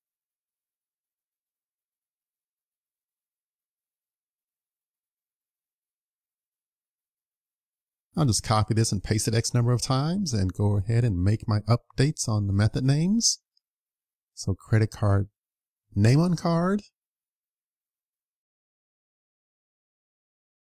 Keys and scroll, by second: 2.3 super+s, 3.1 super+s, 9.8 super+c, 10.9 super+v, 11.4 super+v, 12.3 super+v.